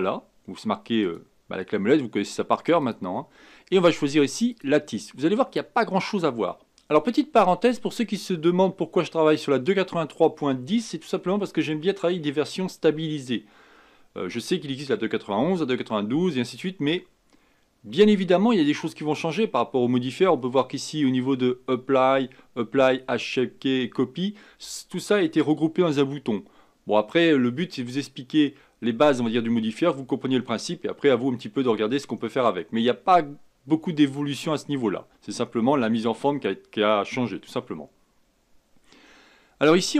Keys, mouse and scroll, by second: 1.0 click, 2.8-5.8 drag.